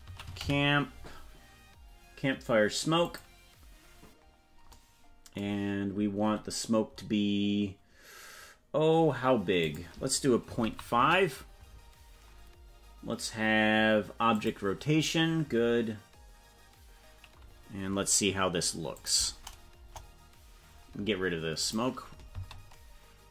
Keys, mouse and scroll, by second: 9.6-11.7 drag, 14.3 click, 18.9 click, 19.8 KP_0, 21.7 click, 22.3 space.